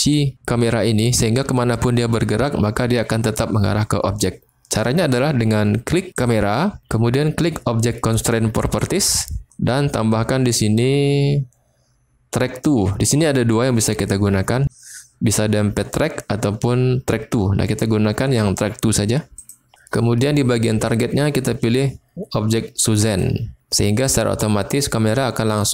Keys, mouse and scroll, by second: 6.1 click, 8.8 click, 10.8-19.5 drag, 20.8-23.2 drag.